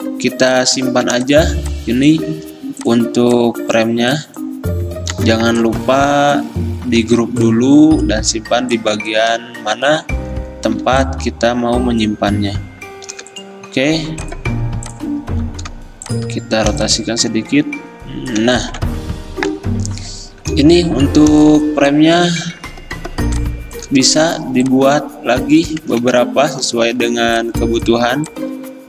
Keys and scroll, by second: 1.3 ctrl+2, 8.2 ctrl+g, 10.9 r, 12.5 c, 13.3 v, 16.8 r, 18.5 v, 19.2 Escape, 26.1 ctrl+d.